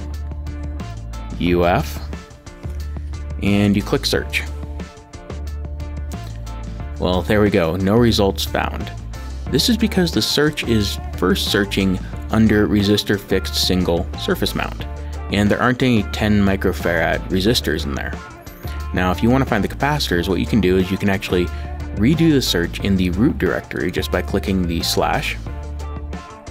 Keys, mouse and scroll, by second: 0.7 u, 1.5 shift+f, 3.6 click, 10.4 click, 23.8 click.